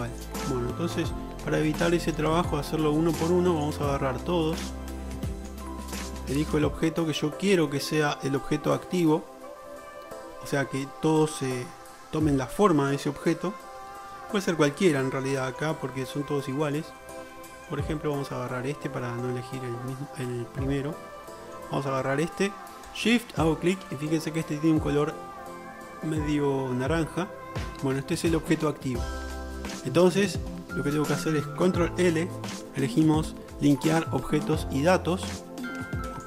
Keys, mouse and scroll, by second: 1.0 Tab, 1.0-1.6 middle drag, 1.8-3.7 middle drag, 3.7 click, 3.9 middle click, 4.6-5.6 drag, 6.4 middle click, 6.8-14.7 shift+middle drag, 17.0-23.1 shift+drag, 23.1-24.2 shift+middle drag, 24.2-25.1 drag, 25.1-25.9 middle drag, 27.5-28.1 shift+middle drag, 29.3-30.0 shift+middle drag, 32.1 ctrl+l.